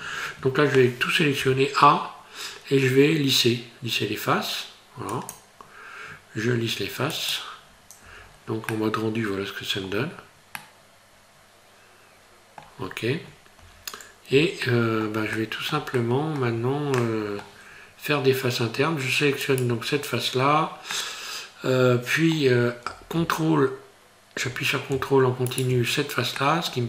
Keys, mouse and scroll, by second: 1.4 a, 5.1 click, 8.0 Tab, 8.3-8.7 scroll down 3, 8.7 middle click, 9.9 scroll down 3, 10.6 middle click, 12.8-13.4 scroll up 7, 13.6 Tab, 14.6 shift+middle click, 15.3 middle click, 15.9 shift+middle click, 17.0 middle click, 17.7 scroll up 2, 19.5 right click, 20.9 middle click, 25.5 ctrl+right click, 26.4 middle click.